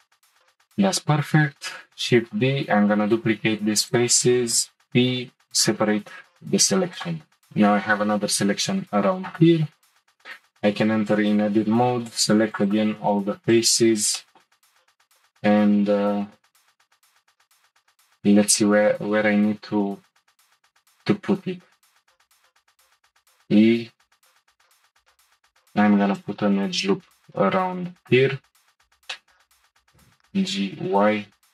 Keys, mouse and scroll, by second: 0.0-0.4 scroll down 1, 0.4-1.9 middle drag, 1.9 shift+d, 4.5 p, 6.6 Tab, 6.9 click, 10.1 Tab, 11.0 click, 11.8 c, 13.5 click, 14.2 shift+middle click, 14.6-15.9 scroll up 1, 22.5 e, 24.8 ctrl+r, 27.5 1, 27.9 click, 29.1 middle click, 29.6 click, 29.9 g.